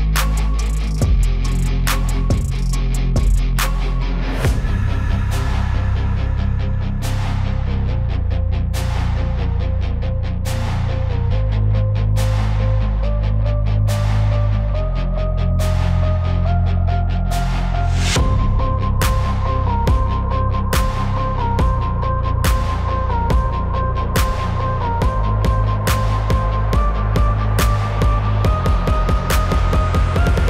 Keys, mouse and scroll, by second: 0.0-1.4 typing, 0.0 click, 0.4 click, 0.8 click, 1.1 click, 1.8 click, 2.6 click, 4.4 z, 4.6 click, 5.6 click, 17.0 click, 18.1 click, 19.9 alt+click, 20.5-20.9 z, 21.5 z, 22.4 click, 23.0-25.1 typing, 23.1 click, 29.0 space, 29.1 click, 29.2 space.